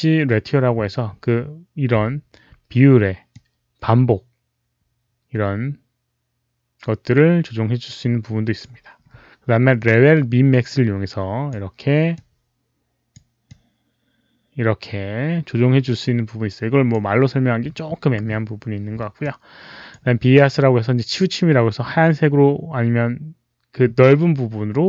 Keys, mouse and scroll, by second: 3.2-8.5 drag, 9.7-11.4 drag, 12.0-13.0 drag, 13.3-16.8 drag, 19.1 click, 20.4-24.8 drag.